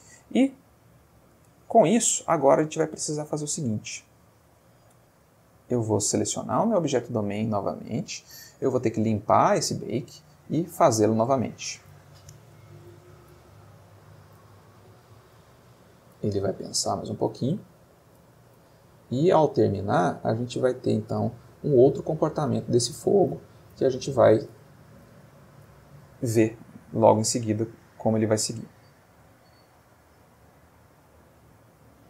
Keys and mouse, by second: 1.3 space, 5.9 click, 7.6 middle click, 8.6 middle click, 9.8 click, 11.1 click.